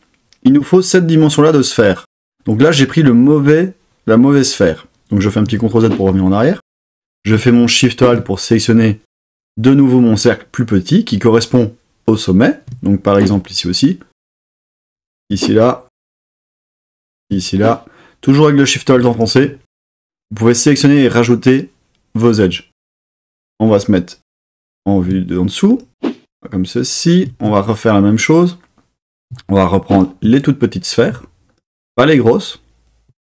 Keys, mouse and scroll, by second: 5.4 super+z, 17.1 alt+shift+click, 23.2-24.3 middle drag, 26.6-27.9 middle drag, 29.9 alt+shift+click, 31.5 alt+shift+click.